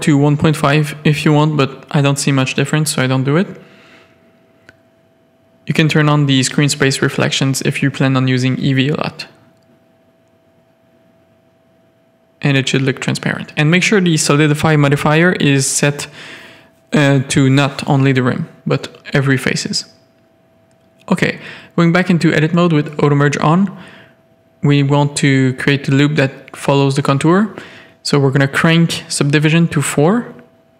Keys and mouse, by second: 0.4 click, 3.4 click, 10.5 middle click, 10.9-11.7 middle drag, 11.8 shift+middle click, 12.4-13.1 middle drag, 13.7 alt+a, 13.8-15.2 middle drag, 15.5 middle click, 15.6 Tab, 16.3 middle click, 16.8 middle click, 19.3 middle click, 20.0 z, 20.2 a, 21.4 g, 23.4 Tab, 23.7 z, 24.2-24.7 middle drag, 25.7 click, 27.6 click, 27.9-29.4 drag, 29.4-29.8 middle drag.